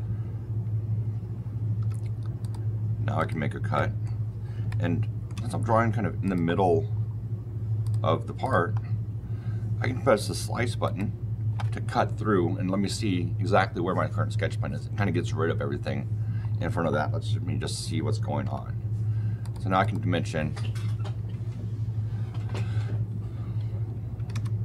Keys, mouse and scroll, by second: 1.7 r, 2.3 click, 3.1 click, 3.7 middle click, 4.6-5.2 shift+middle click, 5.0 middle click, 6.1 shift+middle click, 7.7 shift+middle click, 8.3 shift+middle click, 10.7 shift+middle click, 16.4 shift+middle click, 16.4-18.3 shift+scroll, 18.3 shift+scroll, 18.3 shift+d, 19.3 shift+middle click, 19.7 shift+middle click, 23.6 shift+KP_Decimal, 24.1 shift+KP_5, 24.2 shift+KP_Enter.